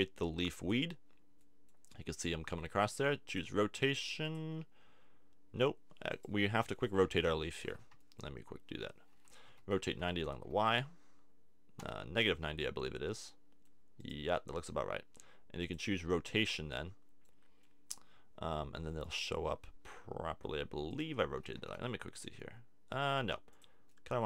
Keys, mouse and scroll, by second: 1.4-3.3 middle drag, 6.2-7.6 right drag, 7.1 KP_7, 9.4 r, 12.3 click, 12.6-13.7 middle drag, 14.0 middle click, 15.6 middle click, 16.3-17.6 drag, 17.6-20.9 middle drag, 20.9-22.5 drag, 21.6 r, 23.7-24.2 drag.